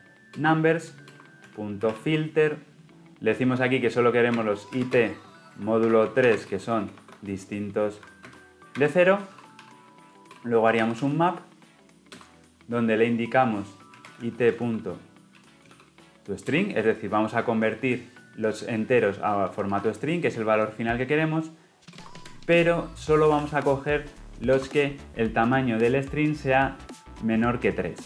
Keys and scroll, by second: 0.3 Return, 12.1 Return, 16.4 Return, 24.5 Return.